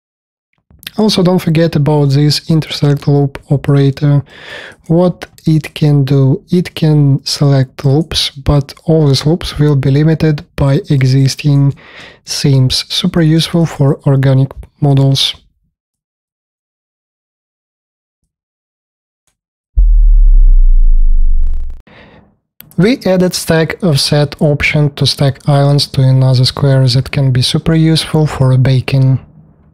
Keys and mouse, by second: 5.0 middle click, 11.0 alt+click, 11.9 space, 12.1 v, 13.0 alt+click, 13.8 click, 16.2 alt+middle click, 16.3 alt+click, 16.8 space, 17.2 v.